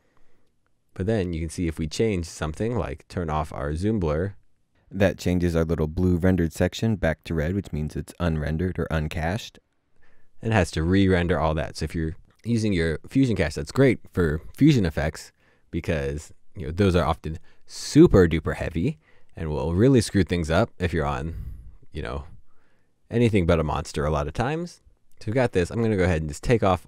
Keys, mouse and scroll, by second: 6.6 right click.